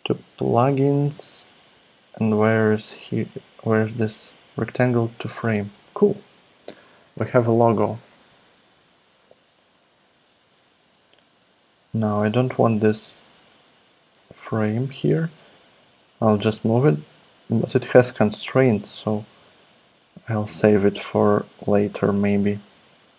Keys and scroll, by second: 5.4 Return.